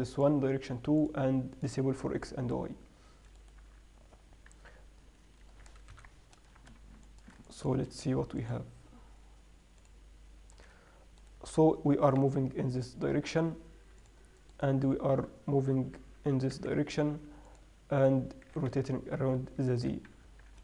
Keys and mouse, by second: 3.9 z, 6.2 ctrl+Up, 8.7-9.4 drag, 9.8 click, 10.6-11.5 drag, 11.5-13.3 right drag, 12.3 g, 14.8-16.6 right drag, 16.4 g, 18.8 r, 20.5 Tab.